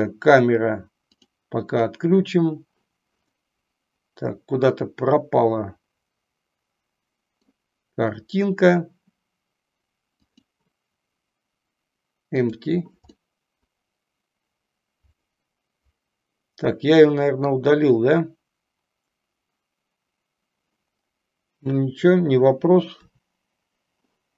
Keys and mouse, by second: 1.1 click, 1.7 click, 3.2-7.5 middle drag, 10.1 click, 12.4 click, 13.1-17.5 middle drag, 23.0 Delete.